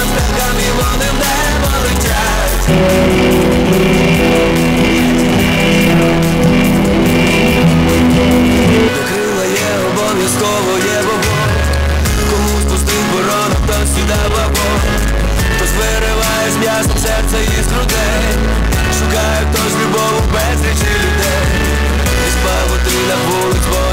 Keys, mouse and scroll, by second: 9.1 Page_Down.